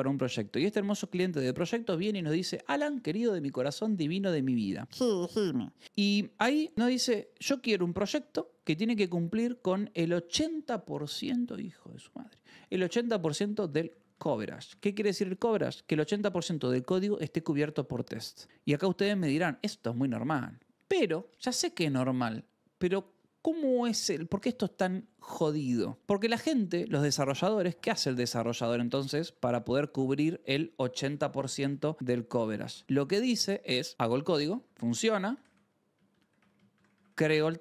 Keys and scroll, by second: 0.0-0.4 typing, 7.8 a, 27.3-35.9 typing.